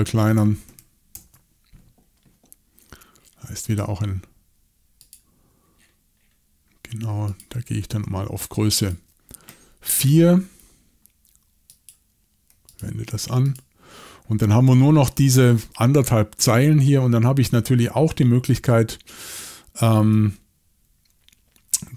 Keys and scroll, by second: 1.1 shift+super+l.